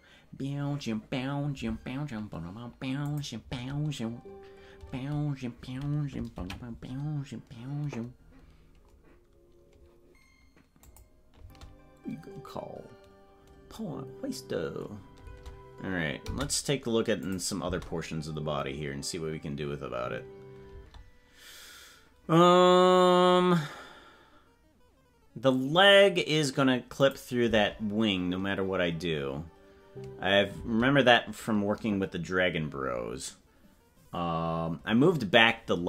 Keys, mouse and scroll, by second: 3.1 click, 3.4 space, 9.0 ctrl+s, 10.9 click, 11.4 space, 16.4 space, 17.3 click, 17.6 space, 27.1 click, 27.4 space.